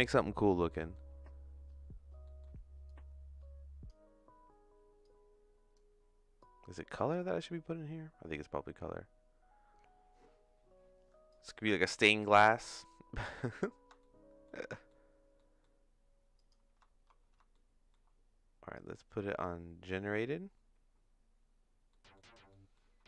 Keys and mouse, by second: 0.7 click, 0.7 middle click, 2.4 middle click, 2.9 click, 5.0 click, 6.4 click, 11.3-12.9 drag, 14.0 shift+middle click, 14.7 middle click, 15.4 middle click, 16.3 click, 17.5 shift+middle click, 18.7 click, 21.9 middle click, 22.7 middle click.